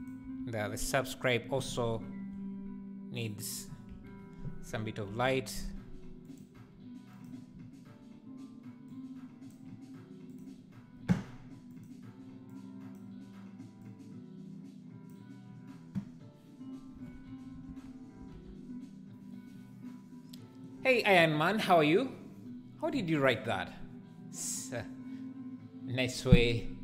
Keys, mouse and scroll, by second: 0.0 shift+right drag, 0.2 shift+s, 2.6 g, 3.9 KP_1, 4.7 r, 6.6 g, 8.9 click, 10.3-11.7 drag, 17.7 alt+a, 18.4 ctrl+s.